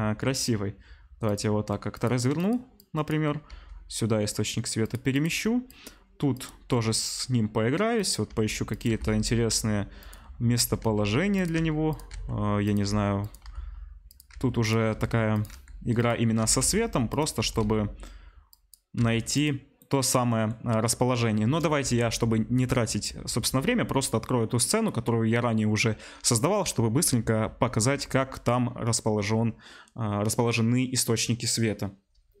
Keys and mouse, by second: 1.9 click, 2.3 click, 2.4 middle click, 2.8-4.9 drag, 3.4 g, 4.8-32.4 middle drag, 5.1 click, 5.6-6.4 drag, 6.7 g, 8.2 r, 8.8 g, 10.8-16.3 typing, 17.4 r, 19.1 g, 21.4 KP_0.